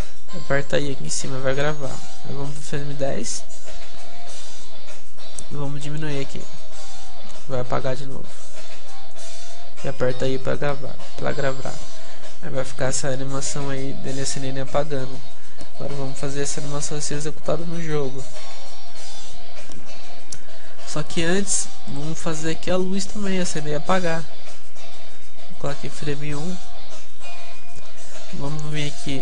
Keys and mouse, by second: 2.6-6.4 drag, 12.1-13.9 drag, 21.1 right click, 21.6-23.1 drag, 23.1-24.8 middle drag, 24.8-29.2 drag.